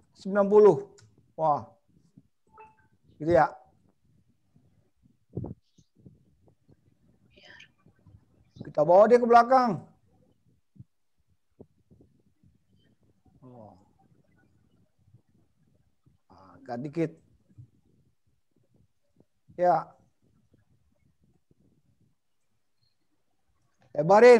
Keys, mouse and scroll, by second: 4.1 middle click, 9.8 click, 11.3 click, 13.0 middle click, 17.4 click, 18.8 middle click, 22.7 click.